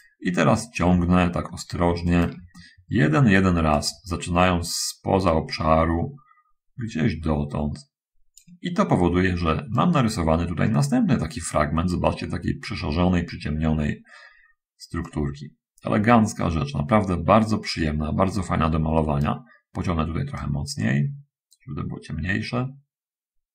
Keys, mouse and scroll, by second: 1.8 shift+middle click, 4.0-8.7 drag, 10.0-12.4 right drag, 15.4-19.7 right drag, 20.5-23.5 drag.